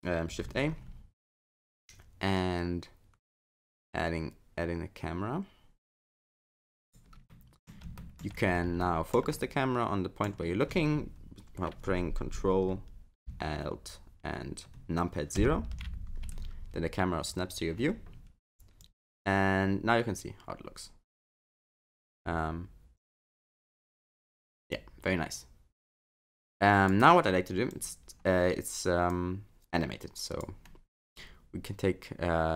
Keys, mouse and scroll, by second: 0.5 shift+a, 7.3 middle click, 8.0 shift+middle click, 8.4-8.8 scroll up 2, 8.8 shift+middle click, 9.3 middle click, 15.4 ctrl+alt+KP_0, 16.3 scroll up 4, 17.0 scroll down 1, 18.8 click, 22.0 space, 23.0 click, 24.1 space, 24.8 click, 27.7 click, 29.2 click.